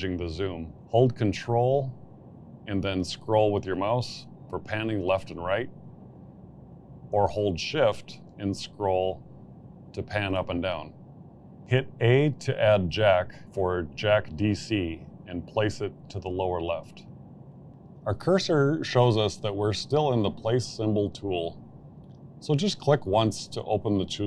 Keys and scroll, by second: 13.5-14.8 typing.